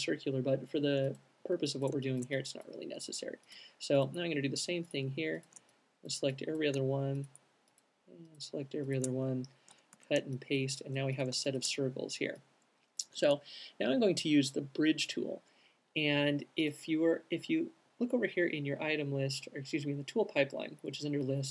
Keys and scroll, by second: 9.8 super+x, 10.1 super+v.